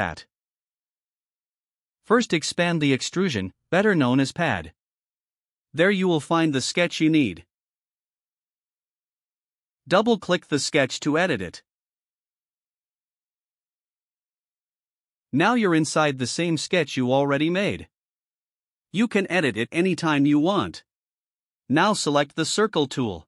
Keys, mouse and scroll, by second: 5.1 click, 6.4 click, 10.7 click, 15.2 click, 15.4 click.